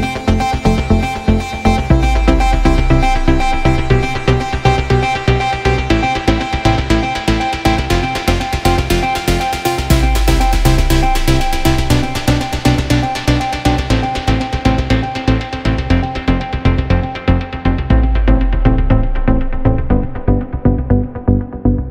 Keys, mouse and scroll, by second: 0.5 Tab, 0.8 Tab, 1.2 click, 1.7 Tab, 1.9-4.0 drag, 4.0 Tab, 4.7-5.2 right drag, 5.2-5.6 middle drag, 5.6 scroll down 1, 5.8-6.5 middle drag, 6.5 Tab, 6.7-8.1 drag, 8.1 KP_0, 8.7 click, 8.9 Tab, 9.2 scroll down 1, 9.4-10.9 right drag, 10.9 click, 12.3 shift+a, 12.4-13.5 middle drag, 13.5 g, 14.6 g, 15.3-15.7 middle drag, 15.7 right drag, 15.8 scroll down 1, 16.0 middle drag, 16.2 right click, 17.4-19.3 drag, 19.3 KP_0, 20.2-21.8 scroll up 1.